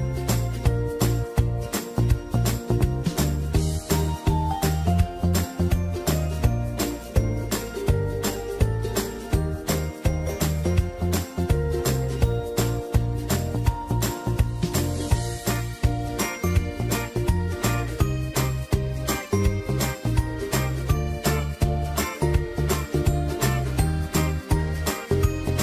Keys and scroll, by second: 4.0 ctrl+alt+z, 7.4 alt+shift+Delete, 8.3 ctrl+shift+Delete, 12.9 ctrl+shift+Delete, 19.1 ctrl+alt+z, 22.4 ctrl+shift+z, 23.7 ctrl+shift+Delete.